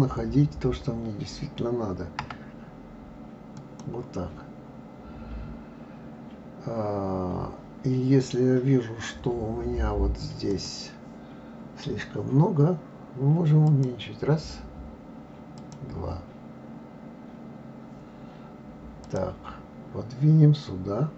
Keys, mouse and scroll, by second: 3.8 click, 10.4 click, 13.7-17.8 drag, 19.0 click.